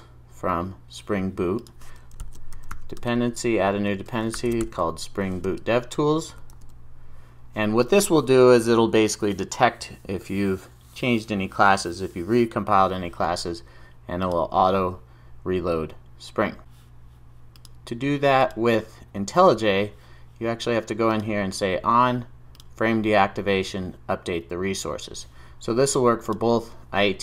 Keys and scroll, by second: 3.2 Return, 6.6 super+s.